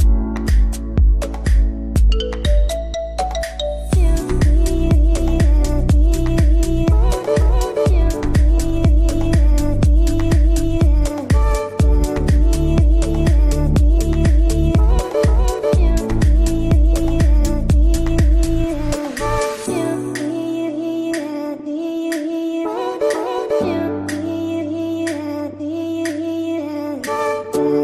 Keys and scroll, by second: 1.8 space, 15.7 ctrl+shift+q, 16.5 Escape, 20.5 g.